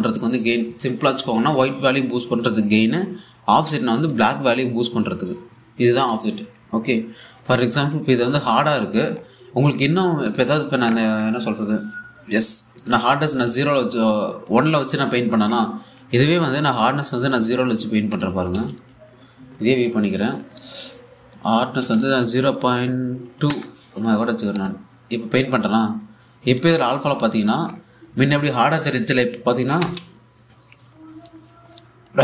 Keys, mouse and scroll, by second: 0.3-4.6 drag, 4.6-7.6 drag, 8.9 click, 9.7-10.3 scroll up 1, 10.3-10.8 scroll down 1, 10.9 click, 18.1-18.8 scroll down 1, 18.8 click, 19.5-20.6 typing, 20.6-21.1 scroll down 1, 21.2 alt+click, 25.2 click, 27.2 click, 30.5 a, 31.7-32.2 scroll down 1.